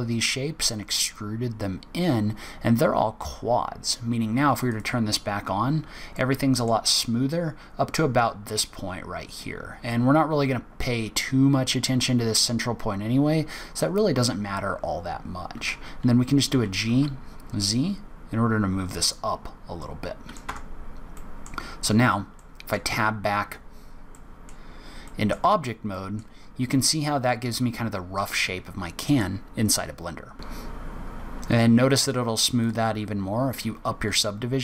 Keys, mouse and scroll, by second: 3.1-4.5 scroll up 4, 4.5 scroll up 1, 4.7 click, 5.4-6.3 scroll down 7, 6.1 middle click, 7.4-8.7 scroll up 12, 8.7-9.5 scroll down 5, 19.2 scroll down 5, 19.7 middle click, 20.4 Tab, 21.1 middle click, 21.4-21.9 scroll down 2, 22.3 middle click, 22.3-22.7 scroll down 2, 23.2 scroll up 2, 23.7-24.5 scroll down 2, 24.0 middle click, 25.0 middle click, 25.8 middle click, 26.3-26.7 scroll up 3, 26.9-27.4 scroll down 2, 27.4-27.9 scroll up 2, 27.9-28.2 scroll down 1, 28.4 scroll up 1, 31.2 click, 32.5 click.